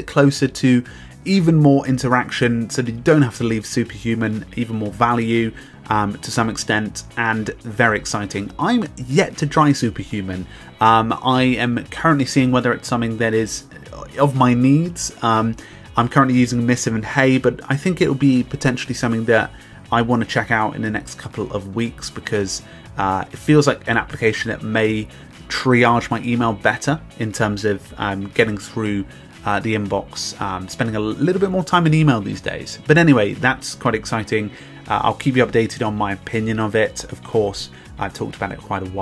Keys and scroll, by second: 0.6 b, 2.1 Return, 3.0 Return, 5.4 Return, 7.1 Return, 8.6 Return, 9.0 super+k, 9.5 super+k, 10.6 Return, 11.2 Return, 12.1 super+k, 12.9 super+k, 13.9 Return, 14.8 Return, 17.4 super+k, 18.7 super+k, 19.7 Return, 20.5 Return, 22.3 Return, 23.6 super+Return.